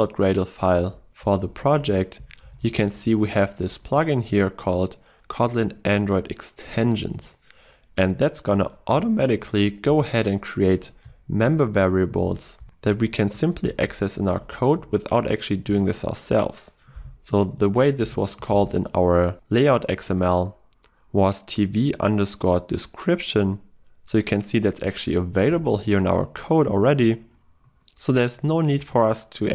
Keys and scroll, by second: 1.6 alt+Up, 9.0 ctrl+e, 12.3 ctrl+y, 15.7 ctrl+w, 25.6 Return, 28.2 Return, 28.8 Return.